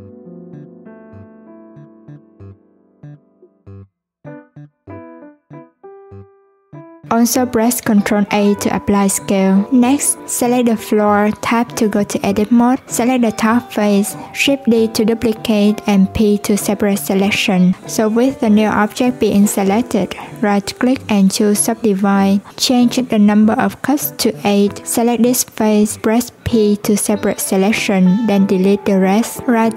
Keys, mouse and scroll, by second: 1.7-3.1 drag, 3.1 o, 4.8 click, 6.4 shift+click, 7.6 ctrl+a, 10.0 click, 11.1 click, 12.7 shift+d, 13.7 p, 14.5 Tab, 15.1 click, 15.6 click, 16.6 Tab, 17.1 a, 19.6-20.9 drag, 21.5 Tab, 22.1 click, 26.6 Tab, 27.0 click, 28.5 click.